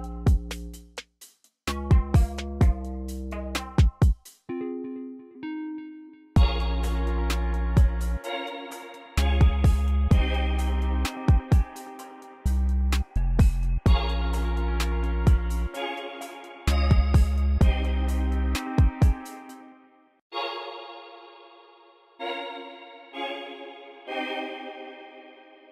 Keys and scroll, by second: 1.1 m, 1.8 BackSpace, 6.5 ctrl+m, 10.0 ctrl+m, 15.2 BackSpace, 16.3 BackSpace, 17.2 super+r, 19.0 space, 19.5 super+a, 19.9 u, 20.2 space.